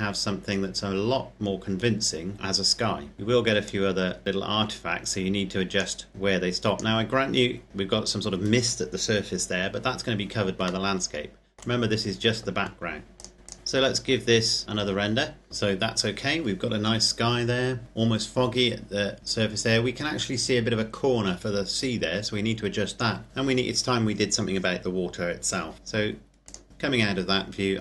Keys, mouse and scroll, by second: 3.5 click, 6.1 click, 10.8 middle click, 14.2 click, 15.5 click, 25.7 Escape, 26.5 click, 26.7 Escape.